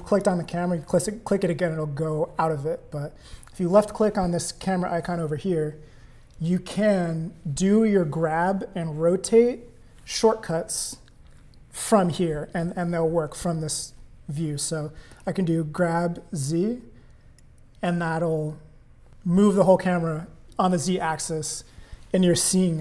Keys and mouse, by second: 0.1 click, 3.8 click, 15.2 g.